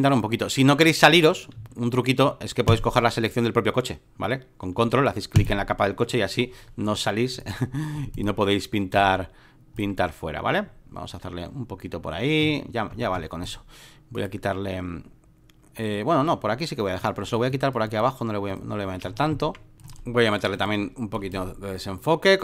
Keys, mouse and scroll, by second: 0.2-1.3 drag, 1.6 ctrl+z, 2.7 ctrl+click, 4.7 ctrl+d, 5.4 ctrl+click, 7.3-11.8 drag, 12.4 x, 13.4 right click, 14.2-16.2 drag, 17.0-19.0 drag, 19.1 alt+middle click, 19.1-19.5 alt+scroll, 19.3 alt+middle click, 19.7-22.4 drag.